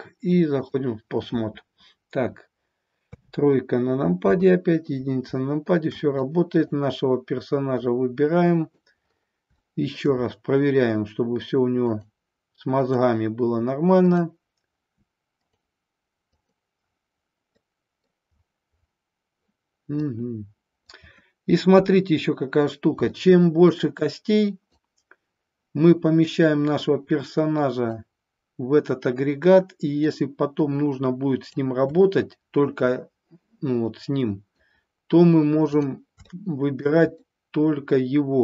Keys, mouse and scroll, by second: 2.9 KP_3, 4.2 KP_1, 6.2-6.7 drag, 7.9 click, 9.6 shift+middle click, 10.0 shift+scroll down 1, 11.8 click, 12.8 click, 14.1 click, 15.3 click, 16.3-17.6 drag, 17.6 middle click, 20.0-21.0 drag, 21.6 KP_1, 23.1-23.7 shift+middle drag, 24.7-27.8 drag, 29.9-31.6 drag, 32.0 shift+middle click, 33.9-34.6 middle drag, 35.6 click, 36.2-36.8 shift+middle drag, 37.3-38.4 middle drag.